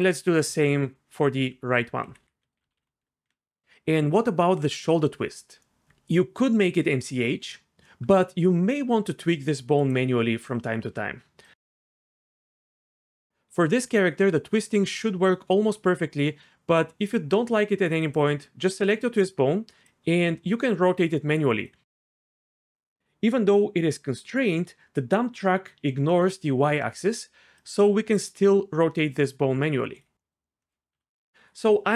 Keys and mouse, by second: 0.1 click, 1.5 F2, 2.2 Left, 9.8 click, 10.5 click, 14.0 click, 18.0 click, 21.5-30.2 right drag, 30.9 a.